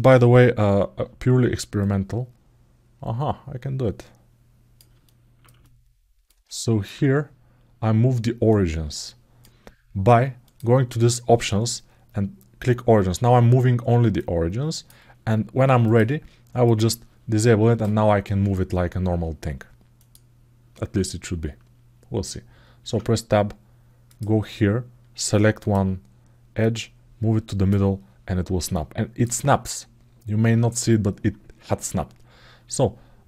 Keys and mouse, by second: 1.6-4.6 drag, 4.8 middle click, 5.4 alt+shift+middle click, 6.3 ctrl+alt+middle click, 8.3 click, 10.2-13.0 drag, 14.0 click, 15.6-17.0 drag, 19.7 click, 22.6 Tab, 23.8 click, 25.0 2, 25.4 click, 26.4-27.5 drag, 28.5 middle click.